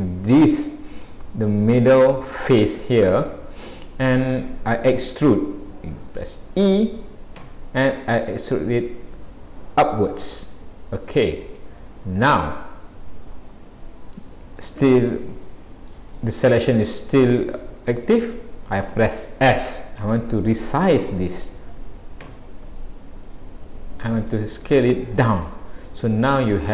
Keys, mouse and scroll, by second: 1.1 middle click, 11.9-12.4 scroll down 3, 12.4 middle click, 14.8-15.4 scroll up 2, 15.4 shift+middle click, 16.2 middle click, 17.8 scroll up 1, 25.7 middle click.